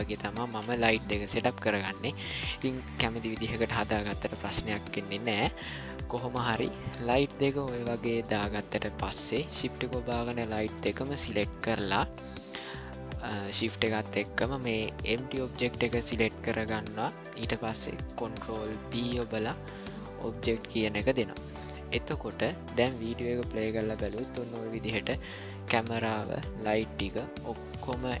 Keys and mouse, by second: 0.4 g, 2.8-3.9 middle drag, 5.0 ctrl+middle click, 5.5-6.3 middle drag, 6.5 ctrl+middle click, 9.0-9.5 shift+drag, 11.9-13.4 middle drag, 18.8 ctrl+p, 21.1 middle drag, 21.9-22.2 middle drag, 22.5 shift+middle drag, 23.8-28.2 drag.